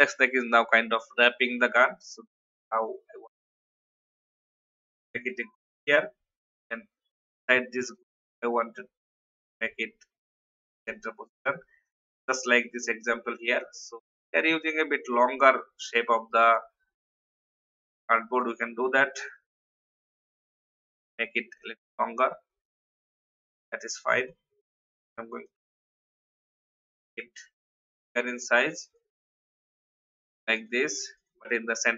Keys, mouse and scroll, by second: 2.2 alt+scroll down 1, 2.8 click, 4.9 ctrl+g, 5.5-6.0 alt+scroll down 1, 6.0-6.4 scroll up 1, 6.4 click, 8.0-12.3 alt+shift+drag, 13.3 space, 13.6-14.1 alt+scroll up 1, 14.1 click, 15.1 alt+scroll up 1, 15.9 click, 17.1-18.3 drag, 19.3 shift+Down, 19.6 shift+Down, 20.8 click, 22.4 shift+Down, 22.6 shift+Down, 23.2 v, 23.6 click, 25.4 alt+shift+click, 28.8 shift+click, 29.4 click.